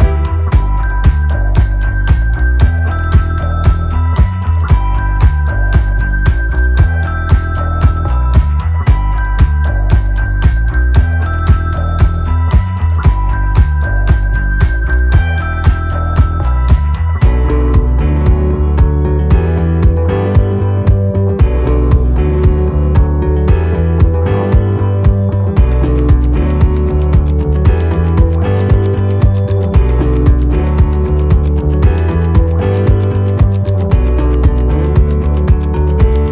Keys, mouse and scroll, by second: 4.2 ctrl+KP_2, 4.9 click, 10.8 click, 21.5 shift+click, 22.1 click, 33.4-36.3 scroll down 1.